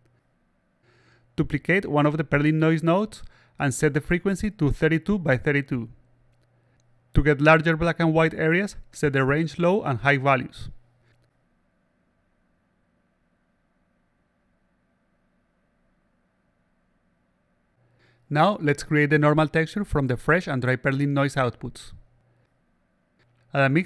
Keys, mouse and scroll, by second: 0.5 middle click, 1.4 shift+click, 2.8 click, 4.6 click, 7.2 click, 9.7-13.5 drag, 14.8-16.3 drag, 17.2 click, 17.3 click, 18.4 click, 19.0 click, 19.8 click, 22.1 click, 23.4-23.8 drag.